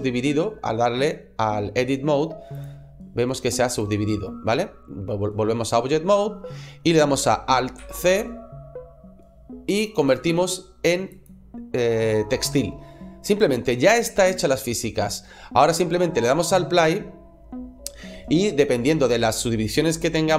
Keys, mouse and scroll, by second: 2.4 click, 4.3 middle click, 7.6 alt+c, 16.3 click.